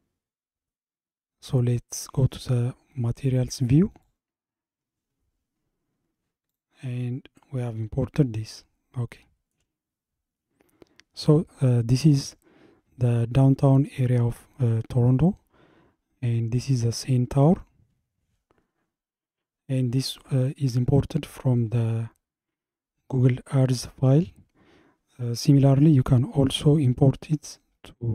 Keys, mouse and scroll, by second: 4.5 click, 6.5 click, 7.1 scroll up 2, 8.6-10.1 shift+middle drag, 10.1-12.1 scroll up 1.